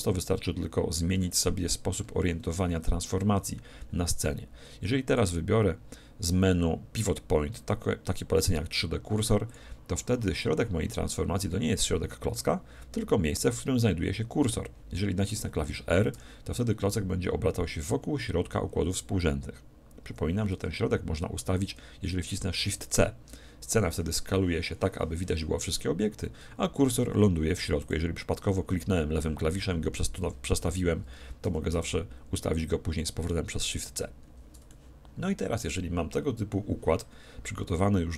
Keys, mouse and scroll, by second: 5.1-6.8 drag, 16.1 r, 22.5 shift+c, 27.8-29.5 drag, 31.4 shift+c, 34.1-34.7 scroll up 1, 34.7-36.5 middle drag, 36.5-37.7 scroll up 1, 37.7 scroll down 1.